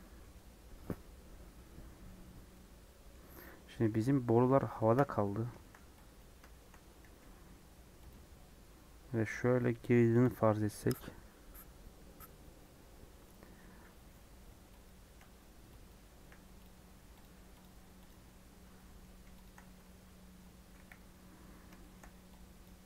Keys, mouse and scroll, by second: 3.6 KP_1, 4.7 shift+middle click, 5.1 scroll up 1, 5.5 shift+middle click, 6.1 click, 6.4 shift+middle click, 6.8 scroll up 1, 7.0 r, 8.0 g, 14.8 click, 15.3 Tab, 15.8 click, 16.7 scroll down 3, 16.9 Tab, 17.1 click, 17.5 click, 18.0 click, 18.7 middle click, 19.4 shift+click, 19.7 Tab, 20.7 KP_1, 21.5 scroll up 1, 21.7 shift+middle click, 22.6 click.